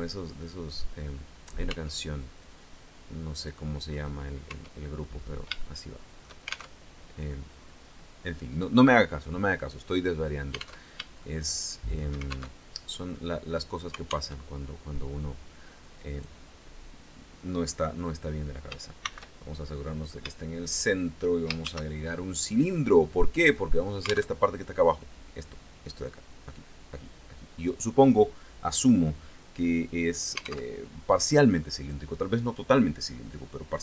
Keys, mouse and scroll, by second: 1.3 Tab, 2.9 click, 4.0 Tab, 4.5-4.9 scroll up 1, 5.1 shift+click, 6.3 alt+shift+Tab, 10.4 alt+Tab, 10.8 shift+click, 12.1 alt+shift+Tab, 13.9 alt+Tab, 15.7 right click, 17.1-17.5 scroll down 2, 18.5 shift+c, 19.2-19.9 shift+scroll up 6, 19.9 shift+middle click, 21.2 shift+a, 23.0 click, 23.9 alt+Tab, 30.2 alt+Tab.